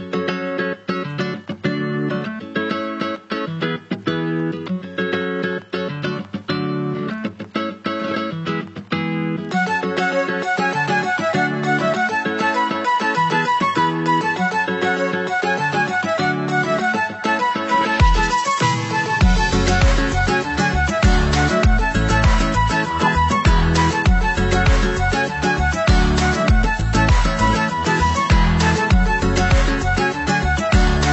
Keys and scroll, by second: 13.4 ctrl+=, 17.4 ctrl+=, 22.8 ctrl+-.